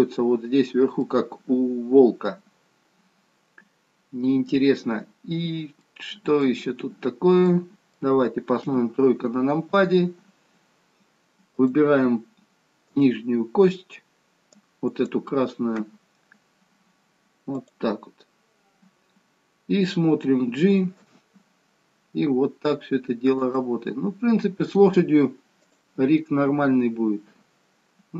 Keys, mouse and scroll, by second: 1.0 middle click, 5.3-6.0 scroll down 2, 6.0 middle click, 7.1-7.6 scroll down 1, 7.6 middle click, 8.8 KP_3, 10.0-10.5 scroll up 1, 10.5-11.6 scroll up 1, 11.6 click, 12.9 click, 16.6 click, 16.9-17.7 scroll up 3, 17.7 click, 19.1-19.8 scroll down 3, 21.3 g, 25.7 click, 26.7 g.